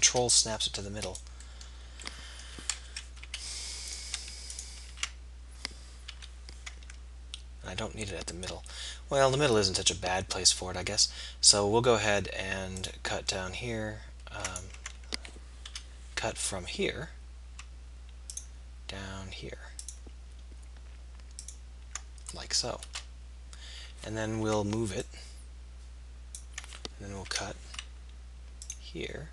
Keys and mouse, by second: 0.0 k, 2.8 KP_3, 3.2 k, 5.0 ctrl+z, 6.0 k, 16.0 k, 25.0-26.4 drag, 27.4 k.